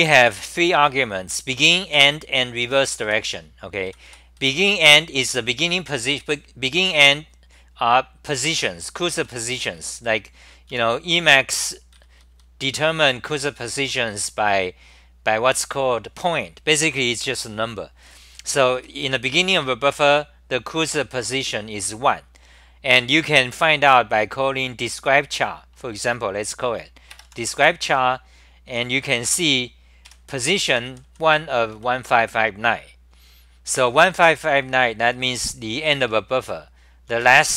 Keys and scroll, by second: 0.2 g, 0.5 9, 2.0 ctrl+g, 2.6-4.6 typing, 5.3 ctrl+g, 9.8 d, 10.7 t, 11.9 r, 12.1 r, 12.3 r, 18.8 d, 29.3-32.2 typing, 33.7 ctrl+g, 35.1-37.5 typing.